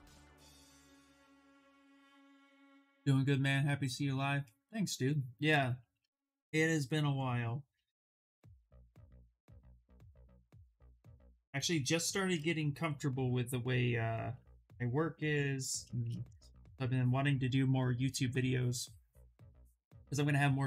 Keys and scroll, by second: 12.7 Escape.